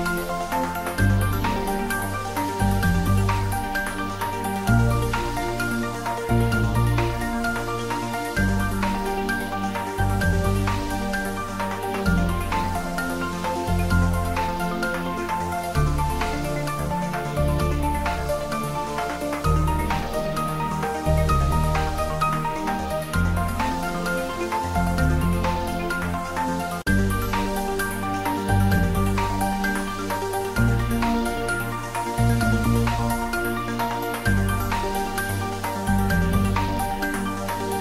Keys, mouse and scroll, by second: 0.1 click, 1.5 click, 2.7-3.7 typing, 4.6 click, 5.1 ctrl+z, 5.5 ctrl+middle click, 6.0-6.9 typing, 7.2 click, 7.4 ctrl+z, 7.6 ctrl+middle click, 8.5 ctrl+middle click, 9.0-9.8 typing, 10.3 click, 10.5-12.5 ctrl+middle drag, 12.5 middle click, 13.1-14.6 ctrl+middle drag, 14.6 ctrl+s, 15.0-16.3 ctrl+middle drag, 16.3 ctrl+s, 16.7 shift+middle click, 17.0-18.7 ctrl+middle drag, 24.3 click, 27.3-29.0 middle drag, 29.8 click, 32.5 ctrl+s, 34.3-36.0 middle drag, 36.0 click.